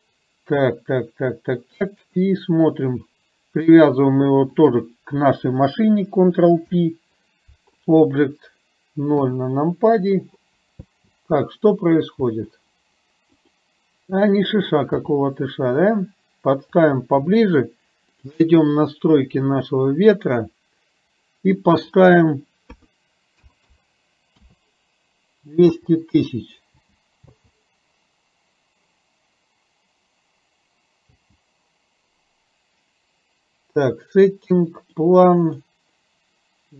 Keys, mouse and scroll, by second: 4.5 shift+click, 6.6 ctrl+p, 9.2 KP_0, 11.1 space, 12.2 space, 13.3 click, 15.0 g, 18.1 click, 21.8-24.6 drag, 23.6 KP_0, 25.8 space, 26.8 space, 27.6 space, 31.2 space, 34.8 click.